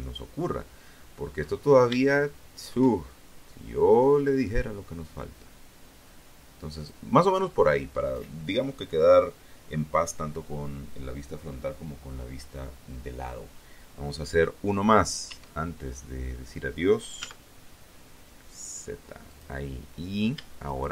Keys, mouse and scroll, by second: 0.2 shift+middle click, 3.2-5.2 drag, 13.4 e, 15.3 z, 17.4 click, 18.8 shift+right click, 19.7 shift+a, 20.8 alt+shift+right click.